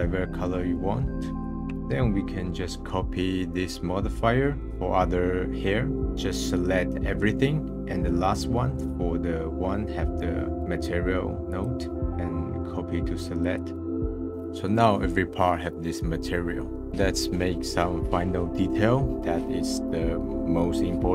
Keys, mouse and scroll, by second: 0.0 scroll down 4, 0.1-1.4 middle drag, 1.4 ctrl+click, 4.7 middle click, 11.9-13.7 drag, 14.3-16.8 middle drag, 20.7 click.